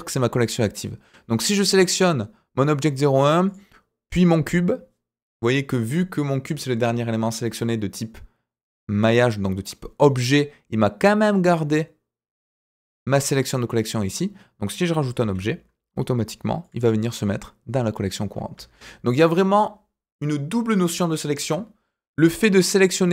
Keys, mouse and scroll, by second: 1.9 click, 3.4 click, 15.2 shift+a, 18.5 ctrl+z, 23.0 click.